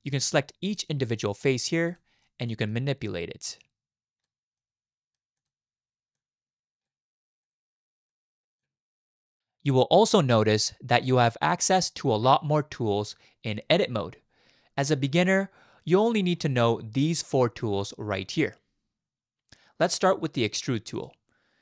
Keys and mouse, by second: 0.7 click, 1.2 middle click, 2.2 middle click, 3.7 click, 4.6 middle click, 5.4-6.9 drag, 7.4 click, 8.1 click, 21.0 click.